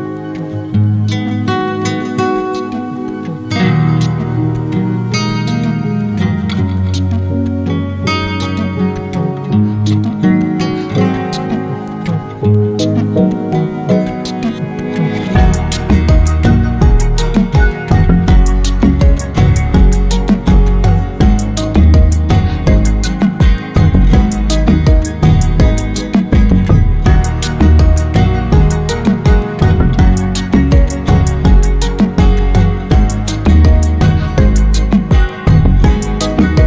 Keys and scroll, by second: 12.3 t, 12.4 Right, 12.5 Right, 12.6 Right, 12.9 Right, 14.5 Down, 14.7 Down, 14.9 Down, 16.6 Return.